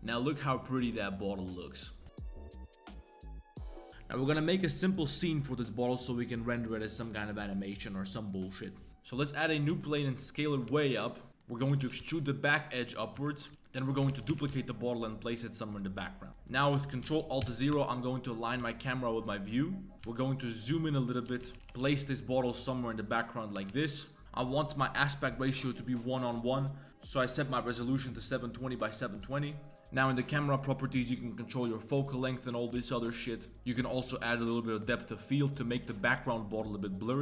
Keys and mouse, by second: 0.0-2.0 drag, 8.9-11.8 typing, 9.5 Tab, 11.0 click, 11.1 middle click, 11.3 Tab, 11.3 click, 13.2 Tab, 13.3 middle click, 13.5-14.3 typing, 13.8 click, 16.0 click, 16.3 click, 17.4 ctrl+alt+KP_0, 17.7 KP_Enter, 18.4 click, 18.6 z, 19.3 g, 20.1 g, 21.3-21.6 typing, 23.1 z, 23.5 a, 23.7 a, 27.6 click, 28.2-29.2 drag, 30.5-32.3 drag, 32.7 g, 34.5-35.7 drag, 36.2 shift+click.